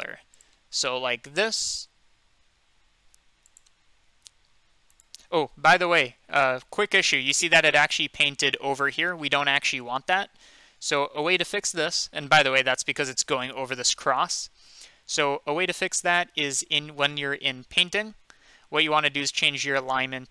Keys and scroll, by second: 9.8 ctrl+z, 10.3 ctrl+z, 10.8 ctrl+z, 11.2 ctrl+z.